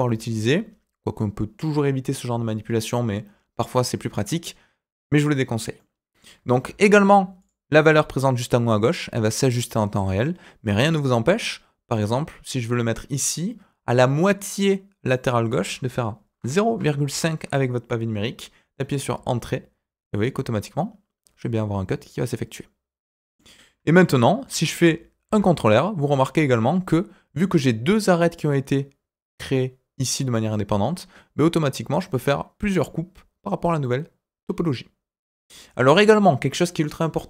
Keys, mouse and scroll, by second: 5.7 middle click, 6.6 ctrl+r, 20.2-23.3 middle drag, 24.1 shift+middle click, 25.2 ctrl+r.